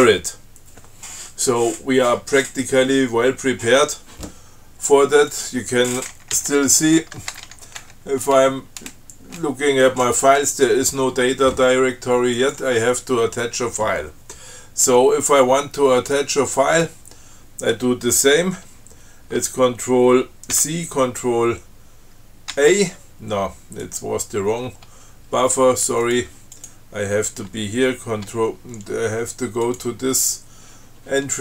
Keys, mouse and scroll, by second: 5.6 click, 6.4-7.7 typing, 8.1 Return, 12.6 click, 20.8 ctrl+c, 22.8 ctrl+a, 24.1 click, 26.3 click, 26.8 click, 29.9 click.